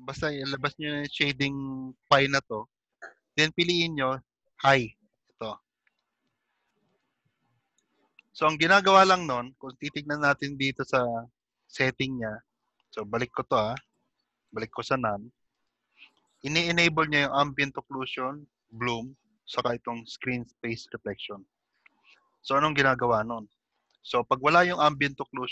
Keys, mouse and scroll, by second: 1.3 Page_Up, 11.3 click, 14.5 Page_Up, 17.6 click, 22.5-23.3 scroll up 6, 25.0 click.